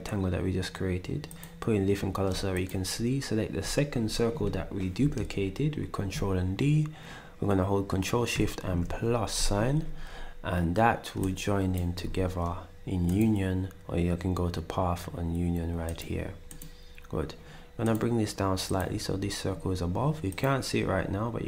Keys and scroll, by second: 8.3 =, 12.0 ctrl+z.